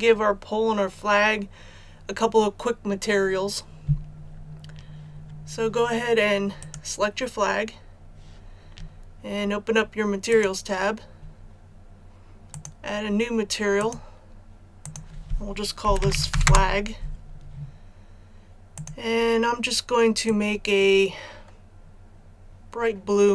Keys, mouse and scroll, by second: 6.6 right click, 10.3 click, 15.9-16.3 typing, 16.4 Return, 18.7-23.3 drag.